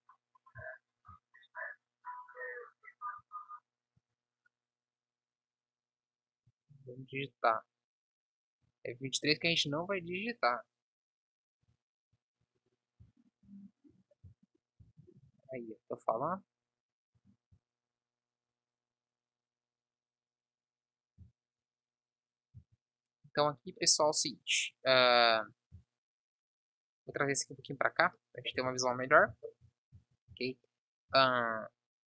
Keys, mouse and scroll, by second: 1.2 shift+d, 3.5 Tab, 4.3 b, 9.0 Tab, 17.5 s, 28.5-32.0 middle drag.